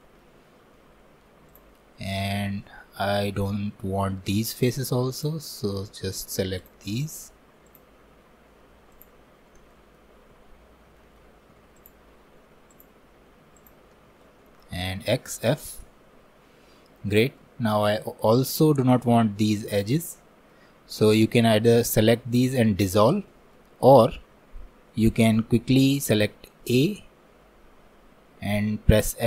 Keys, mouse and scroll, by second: 0.1-1.5 shift+middle drag, 1.5 click, 1.8 scroll up 1, 2.0-4.5 middle drag, 4.5 3, 5.5-6.6 middle drag, 6.6-9.8 shift+drag, 9.8 middle click, 10.7 scroll down 1, 11.0 shift+middle click, 11.8-15.0 shift+drag, 15.1 x, 15.9-17.6 middle drag, 17.6 scroll up 1, 17.8-26.8 middle drag, 26.8 a.